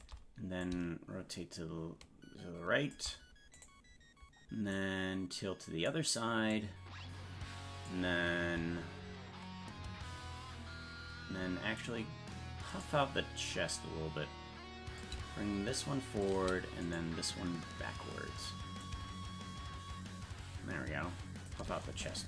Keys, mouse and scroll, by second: 0.6-2.9 drag, 3.5-4.7 right drag, 4.7-5.8 drag, 6.5-7.8 drag, 11.8 right click, 14.9-16.2 shift+drag, 16.9-18.5 right drag, 18.8-21.5 shift+drag.